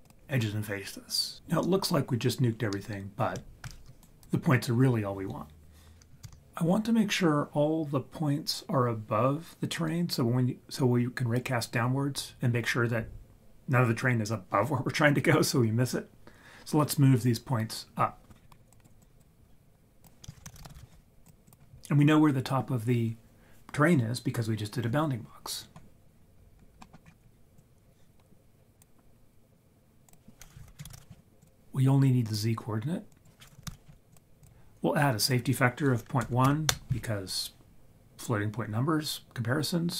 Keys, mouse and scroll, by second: 3.4 right click, 4.0 ctrl+right click, 6.2 ctrl+z, 18.4 scroll down 3, 18.5 scroll up 1, 18.6 scroll down 1, 18.7 click, 19.0 click, 20.0 click, 20.3 shift+a, 20.5 s, 26.8 middle click, 27.0-27.6 scroll up 3, 27.6-31.4 drag, 32.2-34.1 drag, 33.7 d, 34.4 click, 35.2 click.